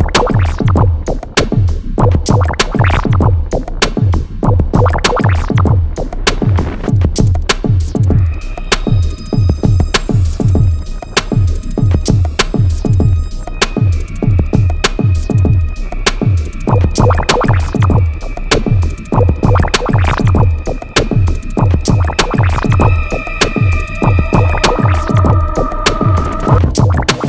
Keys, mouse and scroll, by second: 5.3 click, 6.5 click, 8.8 click, 12.5-13.5 typing, 13.8 click, 15.2 Up, 17.2 click, 17.5-18.4 typing, 19.3 click, 21.3 click, 22.1 click, 23.3 ctrl+t, 23.9-26.1 drag, 26.3-27.2 drag.